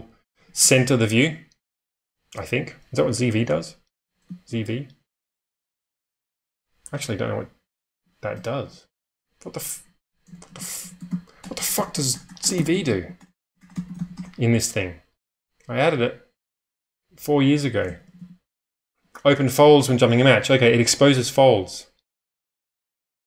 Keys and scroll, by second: 0.1-0.8 typing, 4.4 shift+v, 5.2 u, 5.5 u, 7.4-8.3 typing, 8.5 Escape, 8.6 Escape, 10.0-12.4 typing, 16.5 Return, 17.4-20.1 typing.